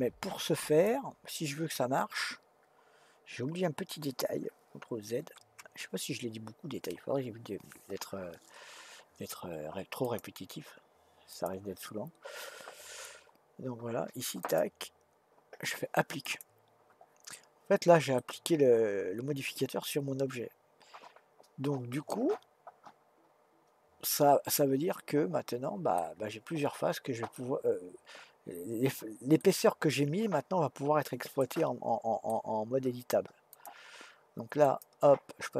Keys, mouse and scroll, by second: 5.2 ctrl+z, 10.0-13.0 drag, 14.4-17.5 drag, 18.1-21.3 middle drag, 27.3-30.3 middle drag, 31.4-33.5 middle drag, 33.5-35.5 drag.